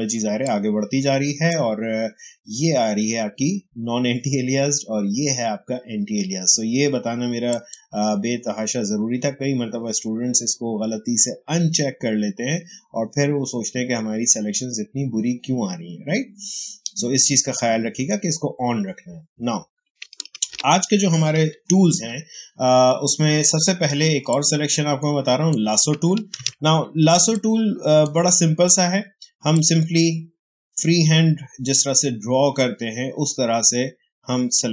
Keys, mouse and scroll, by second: 0.1 space, 0.3 click, 0.6 space, 7.4 click, 20.3 ctrl+a, 21.3 Delete, 24.2-26.3 drag, 26.3 ctrl+d, 27.0 space, 27.2 click, 27.5 space, 29.4-34.7 drag.